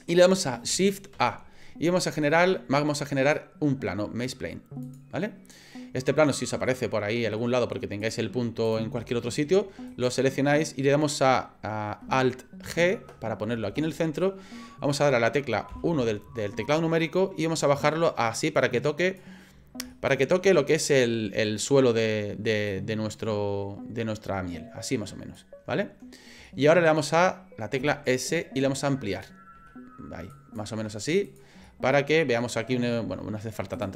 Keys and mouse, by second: 1.1 shift+a, 6.0-7.4 middle drag, 8.0 click, 9.9 right click, 12.6 alt+g, 15.7 KP_1, 17.6-19.2 drag, 19.9 shift+middle click, 22.7-25.3 drag, 26.5 middle click, 27.8 s, 29.6 s, 30.8 s, 31.6 middle click, 33.1 s.